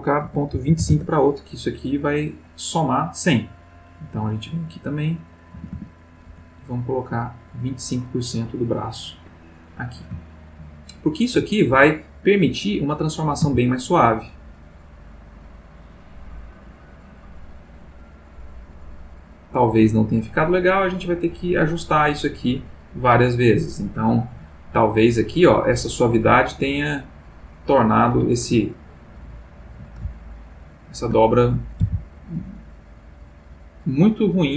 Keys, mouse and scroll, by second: 0.2 ., 0.5 2, 0.8 5, 0.9 Return, 2.4 click, 3.7 click, 5.5 a, 6.2 c, 6.7 click, 9.1 Escape, 9.5 click, 10.3-11.5 ctrl+middle drag, 11.8 ctrl+Tab, 12.6 click, 13.4 r, 27.9 click, 28.7-29.8 ctrl+middle drag, 30.4 ctrl+middle click, 31.8 r, 33.6 click.